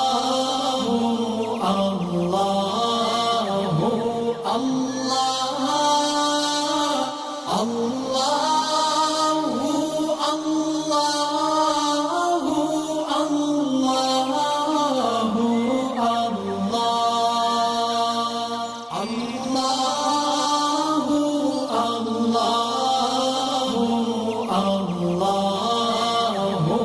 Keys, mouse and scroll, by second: 0.0 click, 1.8-2.6 alt+scroll up 3, 2.6-3.9 drag, 4.0 space, 4.1-5.8 drag, 5.8 space, 8.0 alt+scroll up 1, 8.9 ctrl+z, 9.1 click, 9.2 click, 9.7 scroll down 2, 11.1 click, 11.3 space, 11.5 click, 12.7 space, 12.9 click, 13.3 space, 14.2 click, 15.3 alt+scroll up 1, 16.1 click, 16.6 click, 16.7 alt+scroll up 1, 18.8-20.6 drag, 22.5-26.5 drag.